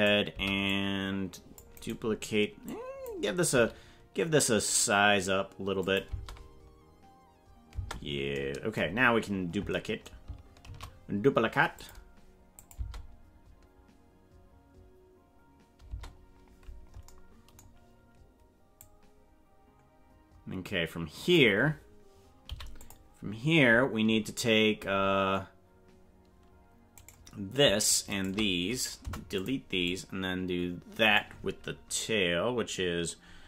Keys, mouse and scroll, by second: 0.3 c, 2.7 click, 3.5 s, 6.1 space, 7.7 space, 9.0-9.7 scroll down 8, 10.7 shift+d, 12.6 click, 12.8 space, 15.9 space, 18.8-21.4 drag, 22.4 i, 24.4-25.0 scroll up 10, 26.9 right click, 28.1 shift+right click, 29.0 Delete, 29.8-31.2 drag.